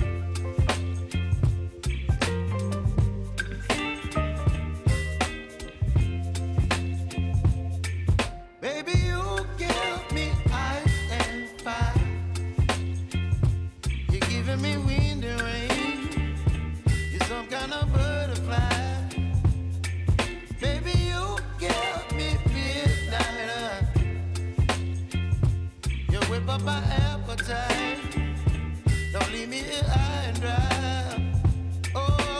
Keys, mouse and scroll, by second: 1.1 p, 1.9 click, 2.1 space, 4.0 click, 4.3 j, 5.0-8.6 drag, 8.6 space, 11.3-17.9 drag, 18.0 F9, 18.9-22.1 drag, 22.1-23.5 drag, 23.5-25.7 drag, 25.7 click, 26.7 click, 27.0 space, 29.3 click, 31.8 space.